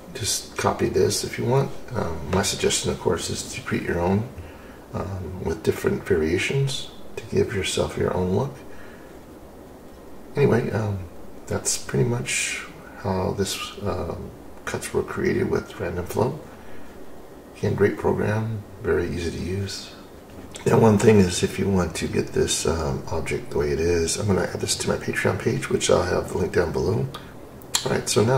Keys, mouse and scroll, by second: 25.2 s.